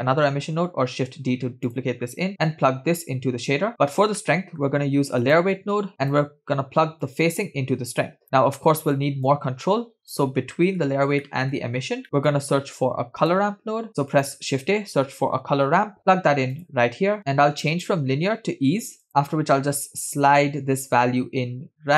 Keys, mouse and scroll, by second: 0.5 shift+d, 2.1-3.2 scroll up 1, 3.2 scroll up 1, 3.3 click, 4.3 middle click, 4.9 shift+a, 7.6 click, 8.6 middle click, 9.4 click, 10.6 middle click, 11.3 middle click, 11.8 scroll down 2, 12.4-13.9 drag, 13.9 middle click, 13.9 scroll up 2, 13.9 shift+a, 18.0-19.1 drag, 19.4-21.9 drag.